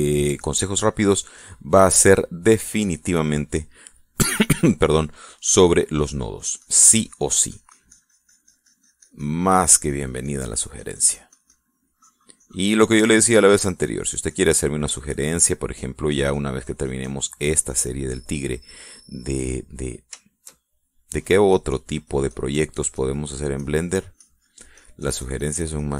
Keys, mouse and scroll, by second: 1.2 click, 2.1 click, 2.9 click, 3.9 click, 5.3 middle click, 6.0-14.1 drag, 14.4-15.9 drag, 15.9 middle click, 16.5 click, 19.2 middle click, 20.3 click, 20.9 shift+middle click, 22.1-24.3 drag, 24.4-25.5 drag.